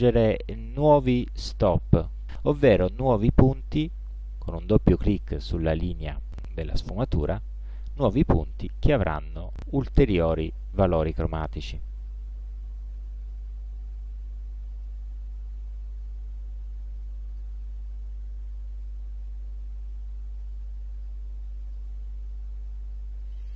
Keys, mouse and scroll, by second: 2.4 click, 5.2 click, 8.1 click, 9.5 click, 10.5 click, 13.4-17.7 drag, 18.9-22.1 ctrl+alt+drag, 23.3-23.5 drag.